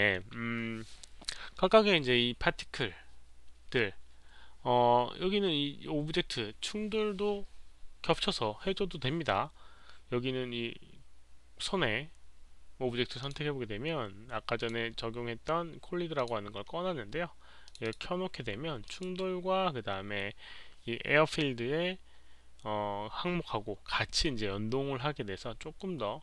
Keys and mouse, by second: 13.1 click, 14.5 click, 16.1 click, 17.6 click, 17.8 click, 18.8 click, 25.3 click, 25.3 click.